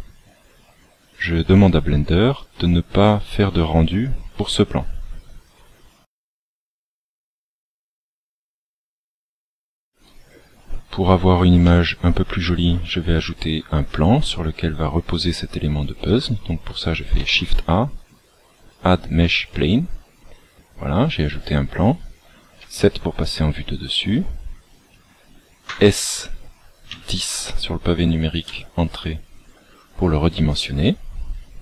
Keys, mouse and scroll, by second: 11.6 middle click, 17.0 shift+a, 22.5 KP_7, 24.2-25.6 scroll down 12, 25.6 s, 30.5-31.4 scroll down 3.